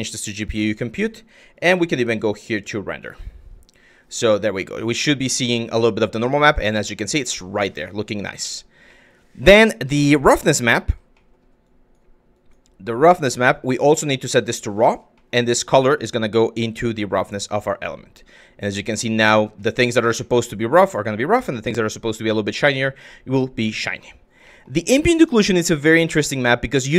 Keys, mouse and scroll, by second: 1.2 click, 1.3 z, 4.4-5.3 drag, 5.5 shift+click, 5.9-7.4 drag, 8.0 click, 8.5 click, 9.3 click, 10.0 click, 10.8 click, 11.3 click, 11.9 click, 12.6 click, 13.6-14.5 drag, 14.8 click, 15.6-17.3 drag, 18.1-19.1 drag, 19.9-22.3 drag, 23.4 click, 24.1 click, 24.6 click, 25.6 click.